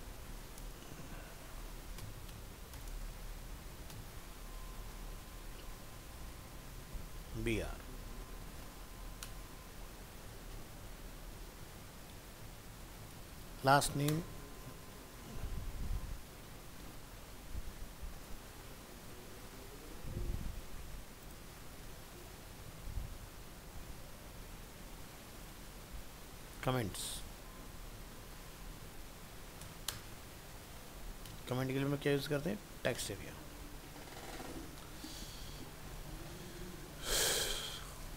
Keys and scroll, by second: 10.6 ctrl+c, 13.5 ctrl+v, 16.5 ctrl+shift+Right, 22.7 shift+Right, 32.1 ctrl+s.